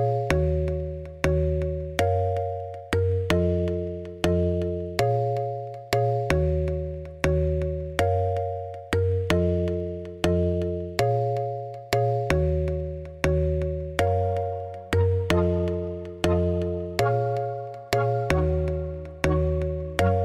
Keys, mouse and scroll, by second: 1.4 shift+middle click, 2.5-3.7 ctrl+drag, 4.0 shift+click, 4.3-4.8 scroll up 1, 4.8 shift+click, 5.2 ctrl+p, 5.7-6.5 scroll down 3, 6.5-8.0 drag, 8.1 click, 8.5 g, 8.9 r, 10.5 g, 11.9 shift+right click, 12.1 shift+a, 13.4 s, 14.6 s, 16.2 e, 17.0 shift+d, 17.8 p, 18.3 Tab, 18.4 click, 18.6 Tab, 18.8 shift+middle click, 19.0 scroll up 2, 19.1 a, 19.4 middle click.